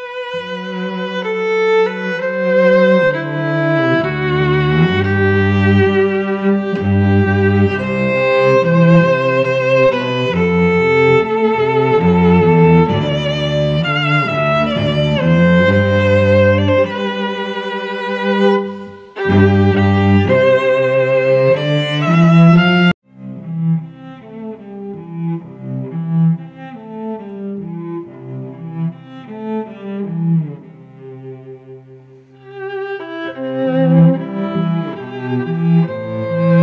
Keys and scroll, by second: 1.1 t, 3.8 ctrl+Return, 4.3 v, 5.1 space, 5.7 v, 5.9 space, 8.8 ctrl+BackSpace, 10.1 space, 10.5 t, 11.5-18.8 typing, 13.5 ctrl+Return, 15.8 Left, 19.3 ctrl+shift+Return, 19.8 v, 21.7 Return, 22.1 v, 22.3 ctrl+t, 24.4 Return, 24.7 v, 24.9 shift+Left, 25.3 shift+Down, 25.4 shift+Left, 25.8 shift+Down, 25.9 shift+Left, 26.3 shift+Down, 26.5 Tab, 26.7 space, 27.4 shift+Down, 27.6 shift+Left, 27.9 shift+Down, 29.0 space, 34.5 space, 34.9 t.